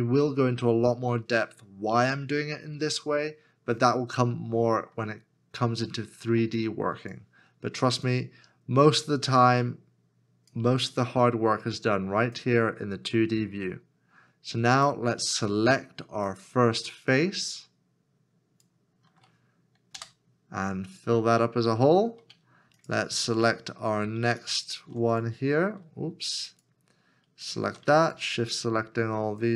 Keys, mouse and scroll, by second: 8.1 shift+click, 10.5 shift+l, 12.4 shift+click, 14.7 shift+l, 16.3 shift+click, 19.9 f, 22.8 alt+click, 24.3 alt+shift+click, 26.7 alt+click, 27.4 alt+click, 28.2 shift+click, 29.2 shift+click.